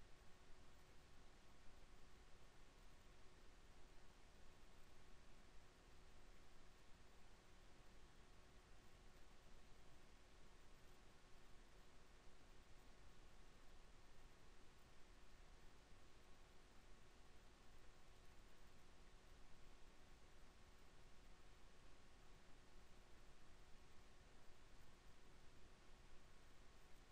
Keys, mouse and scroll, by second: 0.3-1.4 middle drag, 0.3 KP_1, 1.4 z, 3.1 b, 7.5 e, 11.8 e, 20.6 alt+b.